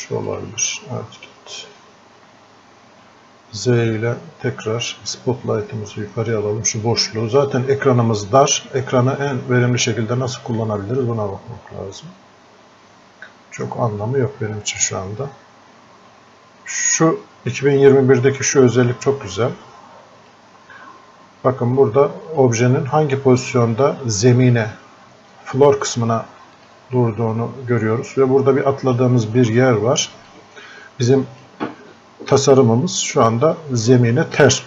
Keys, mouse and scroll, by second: 4.3 z, 5.2-9.8 drag, 11.6 z, 29.9 alt+click, 30.6 click, 33.8-34.6 drag.